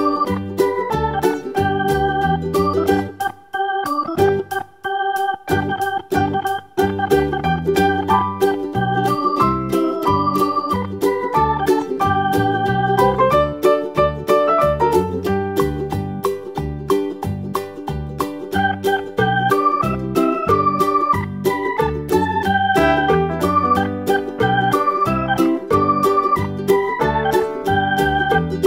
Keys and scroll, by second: 15.8 super+z.